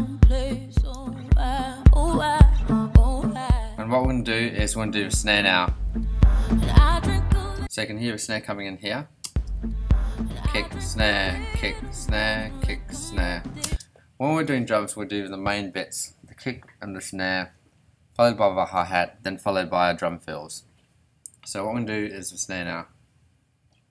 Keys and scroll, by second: 7.5 space, 8.4 ,, 9.2 space, 13.6 space.